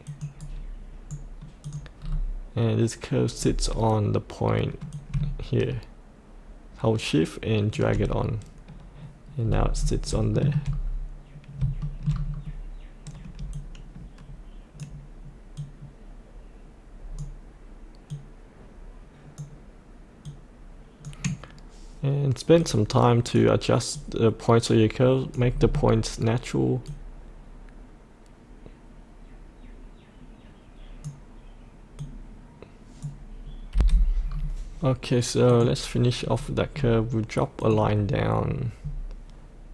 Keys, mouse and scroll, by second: 0.0 click, 0.3-1.4 right drag, 1.6 click, 1.9-4.8 scroll down 1, 4.8-7.7 drag, 9.4-10.1 scroll up 1, 10.3 shift+middle click, 10.6-11.5 scroll up 1, 11.7 shift+middle click, 12.3-13.5 scroll up 1, 13.5-25.6 drag, 25.6-26.8 scroll down 1, 26.8-33.7 drag, 33.7 F8, 34.2-35.4 scroll up 1, 35.4 click, 36.1-36.7 scroll up 1, 36.7-37.5 scroll down 1, 37.5 click.